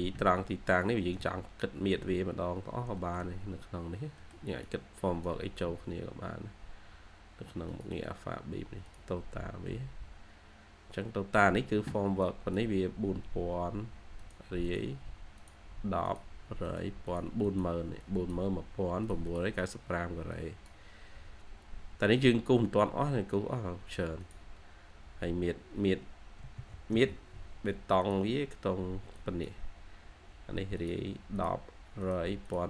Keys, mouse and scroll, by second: 0.7 scroll up 1, 1.0 middle click, 3.2 shift+middle click, 3.2-3.8 scroll up 1, 3.8 scroll down 1, 4.1 middle click, 14.5 double click, 17.0 double click, 19.1 double click, 26.6-27.3 typing, 32.3 double click.